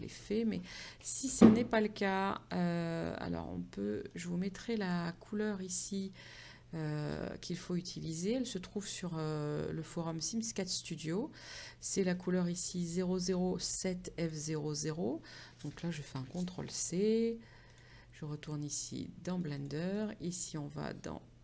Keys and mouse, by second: 2.6 click, 4.2 click, 17.8 click, 19.5 click.